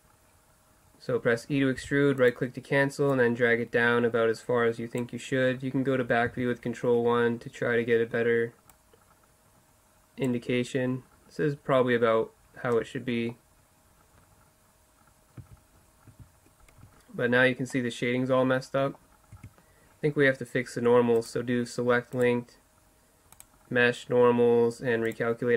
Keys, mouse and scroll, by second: 1.9 e, 3.2-5.0 drag, 8.8-10.6 drag, 12.2-13.3 middle drag, 15.4 z, 16.1 z, 16.9 Tab, 17.7-18.3 middle drag, 18.7 middle click, 19.4 Tab.